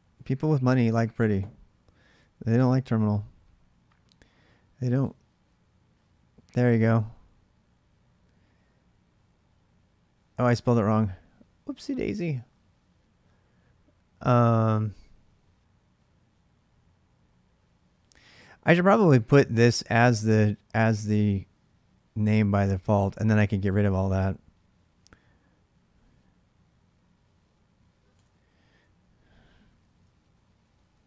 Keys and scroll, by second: 2.2 alt+Tab, 27.9 alt+Tab, 30.4 ctrl+a, 30.9 1.